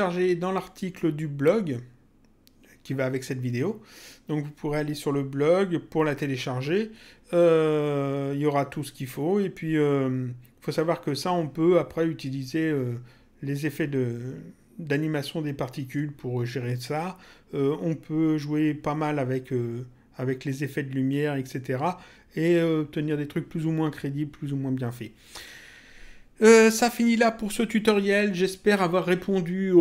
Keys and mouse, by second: 26.9 click, 29.7 click.